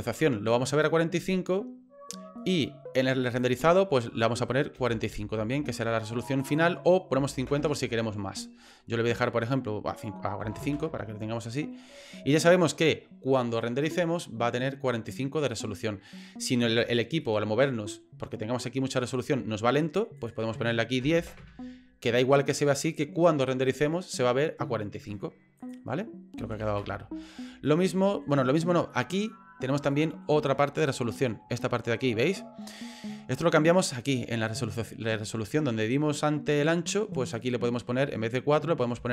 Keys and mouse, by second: 3.5-6.3 drag, 6.5-11.4 drag, 17.2 middle click, 19.0 middle click, 20.2-21.8 drag, 25.6-27.1 drag, 27.6 middle click, 28.9 middle click, 29.9 shift+middle click, 30.6 ctrl+middle click, 37.5-39.1 drag.